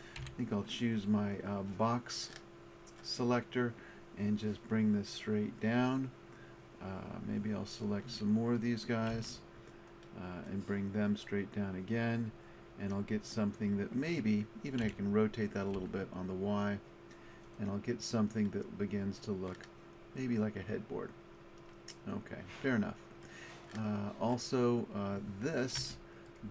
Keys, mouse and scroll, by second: 0.2 b, 4.4 click, 9.1 b, 11.2-13.2 drag, 14.8 r, 17.6 click, 25.8 Tab.